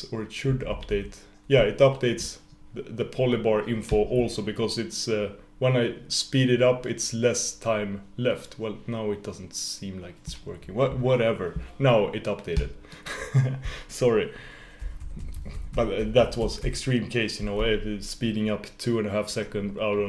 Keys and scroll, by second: 15.2 super+-.